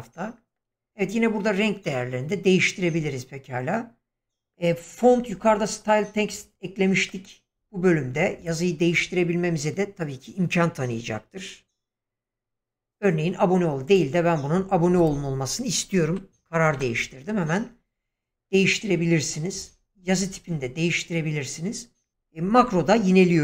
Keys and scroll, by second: 16.1 u, 16.7 n.